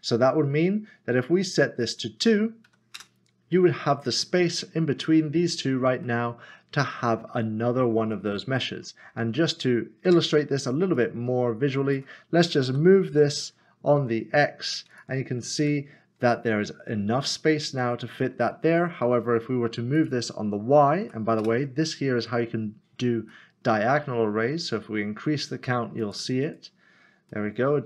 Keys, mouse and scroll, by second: 1.8 click, 2.7 2, 3.0 Return, 6.0 middle click, 8.1 middle click, 8.9-9.5 scroll down 1, 10.0 click, 12.7-14.5 typing, 14.9 click, 15.6 Tab, 16.0-17.8 scroll down 1, 17.8 middle click, 20.0 click, 21.0 2, 21.4 Return, 23.3 middle click, 26.0 click, 27.3 middle click.